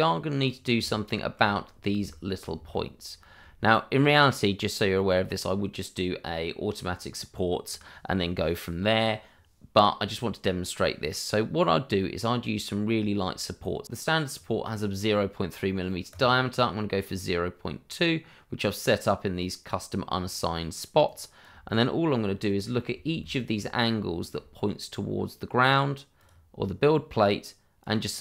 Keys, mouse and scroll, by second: 0.0 right click, 0.8 shift+middle click, 1.6-2.0 scroll up 1, 2.7 middle click, 3.6-4.0 scroll up 1, 13.8 click, 16.1 click, 21.0 right click, 21.7 middle click, 26.1 click.